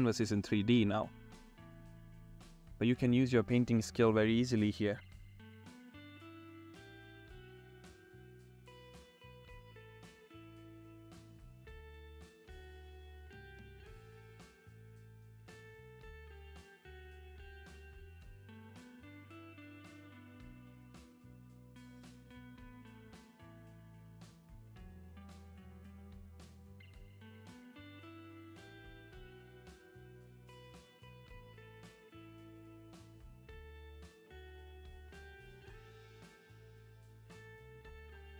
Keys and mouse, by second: 0.2 ctrl+z, 0.3 ], 0.7 ctrl+z, 0.8 [, 0.8 ], 1.6 ], 2.4 ctrl+z, 2.8 click, 3.0 ctrl+z, 3.4-6.2 typing, 3.7 ctrl+z, 4.0 ctrl+z, 4.1 ctrl+z, 5.1 ctrl+z, 6.0 ctrl+z, 6.6 ctrl+z, 7.4 ctrl+z, 7.9 ctrl+z, 8.2 ctrl+z, 9.3-11.8 typing, 9.4 ctrl+z, 10.5 ctrl+z, 10.8 ctrl+z, 11.9 ctrl+z, 13.2-15.0 typing, 13.5 click, 14.0 ctrl+z, 14.1 ctrl+z, 14.5 ctrl+z, 14.8 middle click, 14.9 ctrl+z, 15.1 ctrl+z, 15.7 middle click, 16.0 ctrl+z, 16.3 ctrl+z, 16.4 ], 16.7 [, 17.2 ctrl+z, 17.3 ctrl+z, 18.4 ctrl+z, 18.6 ], 19.5 ctrl+z, 19.9 ctrl+z, 19.9 ], 20.4 [, 20.9 [, 21.2 ], 22.4-24.7 typing, 22.5 ctrl+z, 23.8 ctrl+z, 23.9 ctrl+z, 25.1 ctrl+z, 25.5 click, 26.9 ctrl+z, 27.3 ctrl+z, 27.6 ctrl+z, 28.0 ], 28.4 ctrl+z, 28.6 ctrl+z, 28.9 middle click, 29.6 ctrl+z, 30.0 ctrl+z, 31.0 ctrl+z, 32.5 ctrl+z, 34.8 ctrl+z, 35.2 ctrl+z, 35.6 ctrl+z, 36.1 ], 36.2 ctrl+z, 36.2 ], 36.3 ctrl+z, 36.3 [, 37.3 ctrl+z, 37.5 ], 37.6 ctrl+z, 37.6 ], 38.0 ctrl+z.